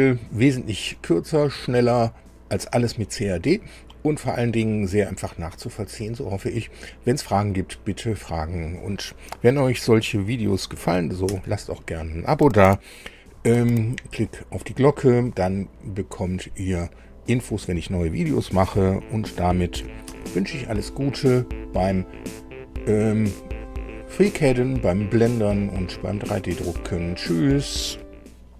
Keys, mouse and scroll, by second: 11.0 super+u, 19.8 super+i.